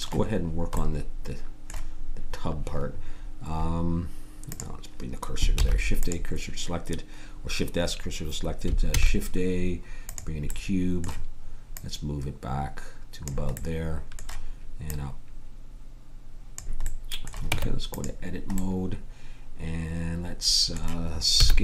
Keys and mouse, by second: 4.5-5.6 drag, 5.6 shift+s, 6.0-8.6 drag, 8.9 shift+a, 10.5 click, 17.5 Tab, 21.4 s.